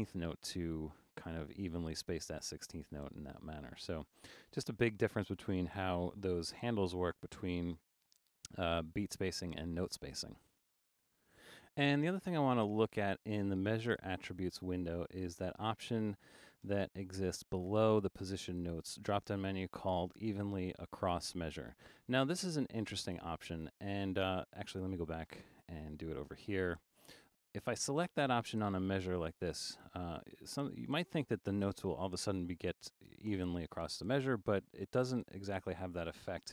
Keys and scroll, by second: 4.4 Escape, 4.7 super+a, 5.8 super+4, 7.7 super+u, 16.7 Return.